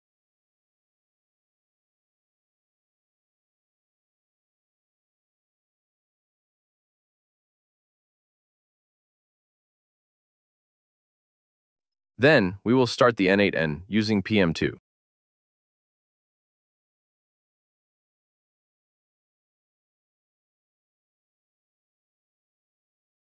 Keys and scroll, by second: 7.6 super+v, 15.3 shift+`.